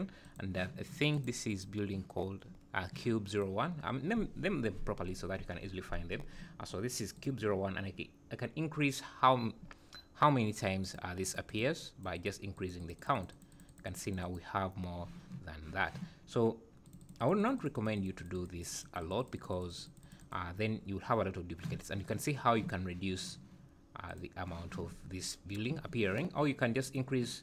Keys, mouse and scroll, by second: 0.2 click, 1.1 click, 1.5 click, 3.3 click, 5.1-6.3 scroll down 16, 7.1 click, 10.8 click, 11.2 click, 11.5 click, 11.8 click, 12.1 click, 12.5 click, 12.8-13.8 click, 13.0 click, 13.1 click, 13.5 click, 13.7 click, 14.0 click, 14.2-17.2 click, 16.8 click, 17.0 click, 17.4 click, 17.6 click, 17.7 click, 17.9 click, 18.2 click, 18.3 click, 18.6 click, 18.8-19.8 click, 19.0 click, 19.2 click, 19.5 click, 19.7 click, 20.0 click, 20.2 click, 24.1 click, 26.8 click.